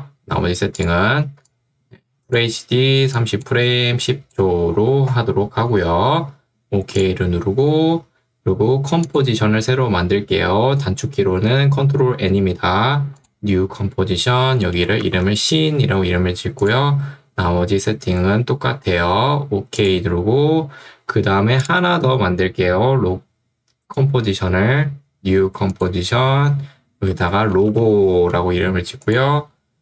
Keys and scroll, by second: 1.4 ctrl+2, 5.8 Escape, 14.4-16.1 typing, 26.9-28.4 typing.